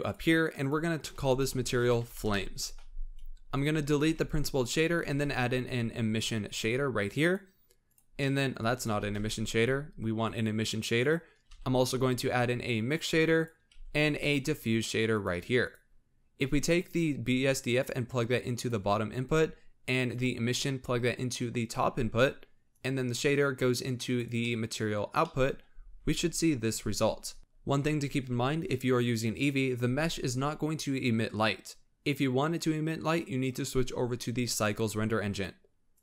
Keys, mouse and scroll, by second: 4.0 x, 4.3-5.0 scroll up 5, 5.0 shift+a, 8.2 middle click, 8.5 click, 8.9 x, 9.2 shift+a, 11.4 shift+a, 13.7 shift+a, 16.7-20.1 drag, 22.6 click, 24.4 middle click, 25.0 scroll up 1, 25.1 middle click, 25.6 z, 26.7 scroll up 3, 32.0 click, 32.9-36.0 drag.